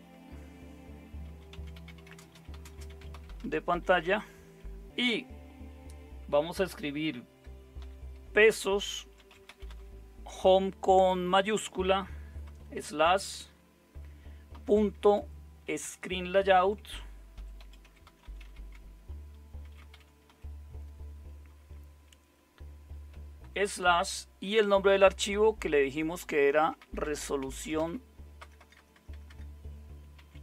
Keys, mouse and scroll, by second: 0.0-4.5 typing, 7.8 typing, 9.0-10.2 typing, 12.7 typing, 14.5-15.1 typing, 16.3-20.8 typing, 16.6 Caps_Lock, 23.4 typing, 24.7-30.4 typing.